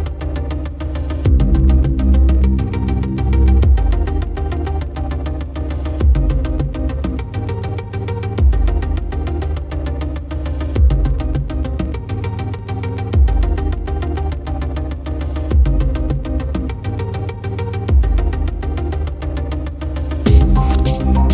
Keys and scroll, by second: 4.6 ctrl+-, 6.0 ctrl+=.